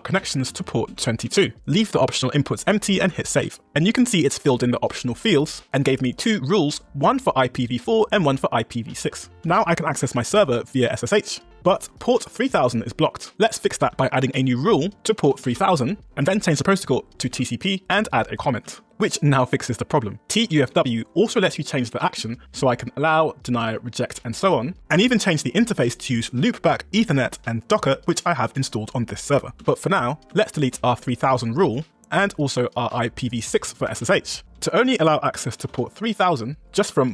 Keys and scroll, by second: 0.2 Tab, 3.0 Return, 3.6 Down, 4.2 Return, 4.8 Down, 5.3 Up, 9.3-10.2 typing, 10.4 Return, 13.3 Up, 13.8 Return, 14.9-15.8 typing, 17.8 Return, 20.7 Tab, 21.4 Tab, 22.2 Return, 23.2 Down, 24.9 Return, 26.5 Down, 27.8 Tab, 28.8 Return, 29.6 Return, 30.3 Return, 31.0 Return, 31.8 Down, 32.2 Return, 33.0 Return, 33.5 Down, 33.9 Return, 34.6 Tab, 35.2-36.1 typing, 36.8 super+v.